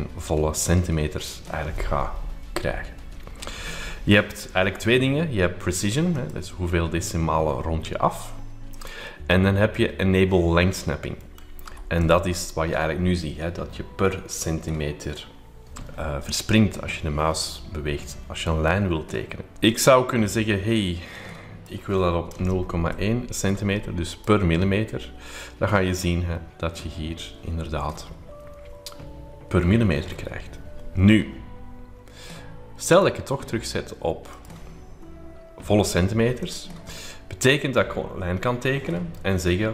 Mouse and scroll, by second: 6.2 click, 8.7 click, 11.2 middle click, 11.2-12.0 scroll up 3, 12.0-20.5 drag, 21.2-22.5 drag, 24.1 click, 32.9 click, 34.3 click, 36.4 click.